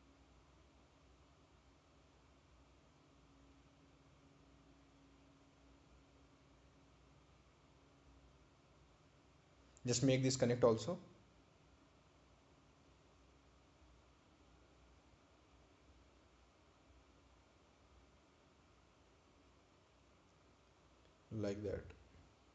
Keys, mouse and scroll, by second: 5.2 right click, 6.6 ctrl+click, 12.5 click, 15.4 click, 19.7 click, 21.1 click.